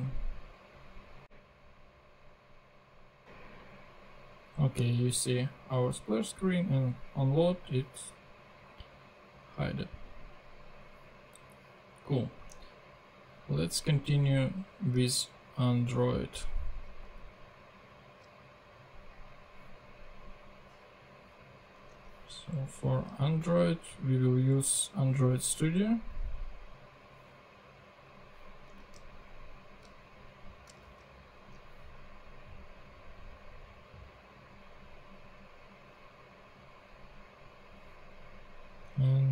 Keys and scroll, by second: 15.1 super+q, 17.3 super+Tab, 22.1 super+Tab, 22.9 super+q, 28.8 super+Tab, 31.0 super+Tab.